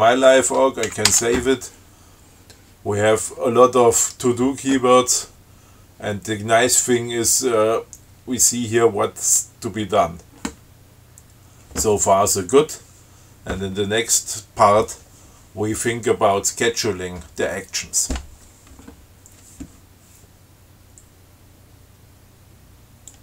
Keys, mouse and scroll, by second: 1.1 ctrl+x, 1.3 ctrl+s.